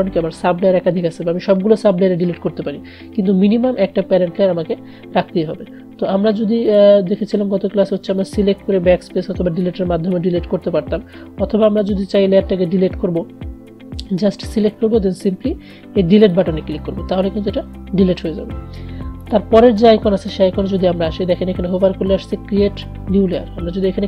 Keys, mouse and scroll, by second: 6.7 click, 6.8 click, 11.9 click, 16.3 click, 19.3 click.